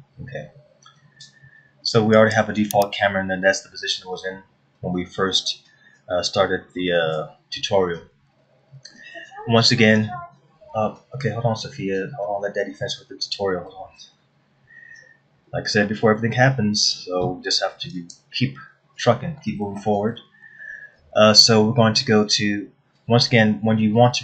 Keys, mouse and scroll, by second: 1.9 scroll up 1, 2.8 click.